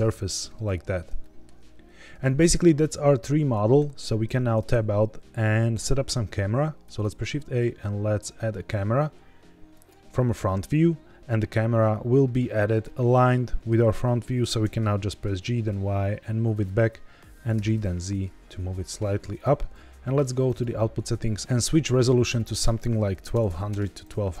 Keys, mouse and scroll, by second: 0.8 scroll down 2, 1.1 shift+middle click, 4.2 Tab, 6.9 shift+a, 12.8-13.6 middle drag, 13.8-14.3 scroll down 3, 14.3 g, 14.5 y, 16.4 click, 17.5 g, 17.6 z, 19.3 click, 20.4 click, 21.4 ctrl+z, 22.2-24.4 drag, 23.4 KP_0.